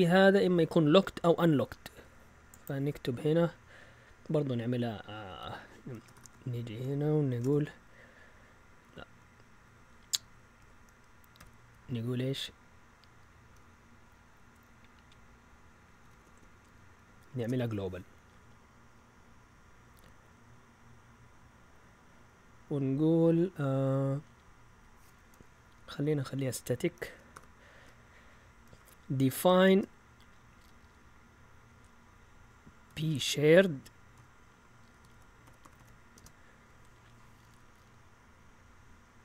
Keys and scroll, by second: 4.2 Up, 5.2 Down, 6.1 shift+9, 7.2 shift+Escape, 7.5 ;, 8.8 Right, 9.1 Right, 9.8 Left, 10.5 a, 12.1-13.1 typing, 15.4-17.9 typing, 25.7 Up, 25.9 Up, 26.1 Up, 27.3 typing, 28.4-30.0 typing, 32.8 typing, 34.1-36.2 typing.